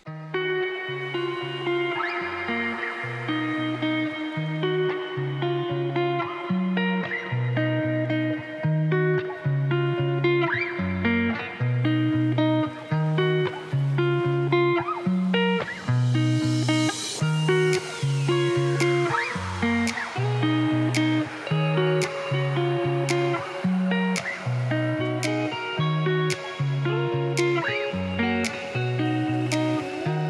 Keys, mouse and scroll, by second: 0.3 Tab, 0.6 click, 1.1 x, 1.4 click, 1.5 x, 2.0 click, 2.5-3.0 z, 4.4 click, 4.5 x, 5.0 x, 5.4 click, 6.6 shift+d, 9.2 s, 10.8 click, 11.3 shift+d, 13.8 shift+z, 14.8 z, 15.6 click, 16.2 s, 18.0 click, 19.3 Tab, 20.0 click, 21.2 click, 21.9 g, 26.4 Tab, 26.7 click, 26.9 Tab, 27.1 click, 27.8 g, 29.0 Tab, 29.0 click, 29.3 Tab, 29.4 click, 29.8 g.